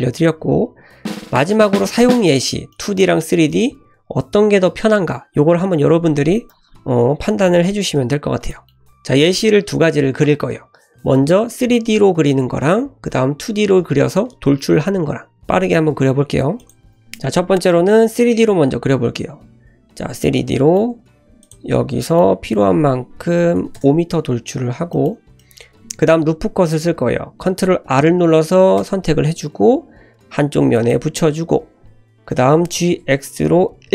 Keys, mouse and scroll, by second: 2.2-2.7 scroll down 3, 2.7-3.0 middle drag, 3.0 click, 3.3-4.0 scroll down 1, 4.0-5.5 scroll down 1, 6.1 click, 6.7 Delete, 7.6 `, 7.9-8.4 scroll up 3, 8.5-8.9 shift+middle drag, 18.9-19.4 scroll up 1, 19.4-20.0 scroll down 2, 20.2-21.0 middle drag, 21.0 Tab, 21.2 3, 21.4 click, 21.7-22.1 scroll down 2, 22.0 middle click, 22.4 g, 24.6-24.9 scroll up 2, 24.9 shift+middle click, 25.4 middle click, 25.8 ctrl+z, 27.5 ctrl+r, 32.5 g.